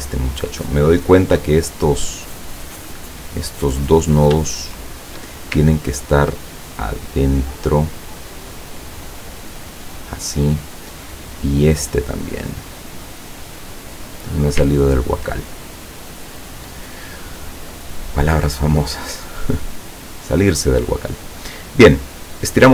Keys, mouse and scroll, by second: 0.2-1.5 drag, 2.7 click, 3.4 click, 4.8 shift+click, 5.8-6.1 ctrl+scroll up 2, 6.9-9.5 drag, 9.7 scroll up 1, 9.8-10.8 scroll down 1, 11.6 click, 12.3-14.4 drag, 14.8-15.2 ctrl+scroll down 1, 15.6 ctrl+middle click, 21.4 click, 22.4-22.7 drag.